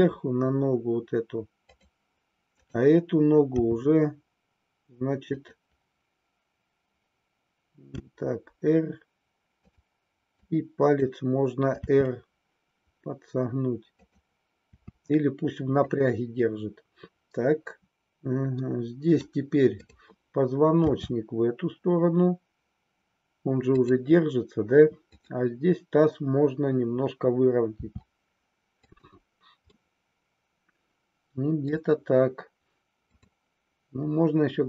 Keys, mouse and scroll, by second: 1.8 click, 2.5-3.9 drag, 4.0 g, 5.4 click, 7.9 r, 9.8 click, 10.5 click, 11.8 r, 14.1 click, 14.6 r, 16.0 click, 18.6 middle click, 19.8-21.1 drag, 21.3 r, 23.8 click, 25.0-27.1 drag, 27.8 r, 28.9 click, 29.8-31.7 middle drag, 33.1-34.6 drag.